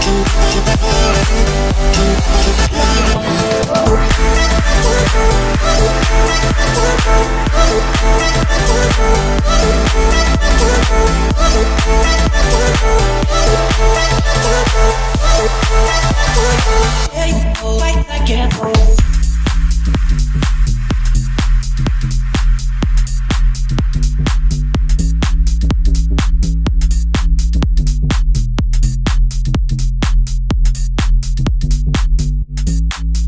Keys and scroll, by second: 9.0 Escape, 10.4 o, 12.9 Escape, 19.4 Return, 22.2 Escape.